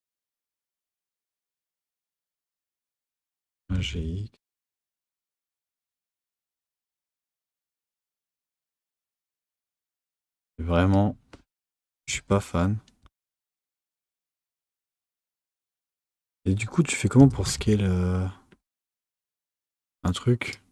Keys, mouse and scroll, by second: 2.4 click, 3.5 g, 7.0 Tab, 10.1 Tab, 10.8 click, 12.3 alt+s.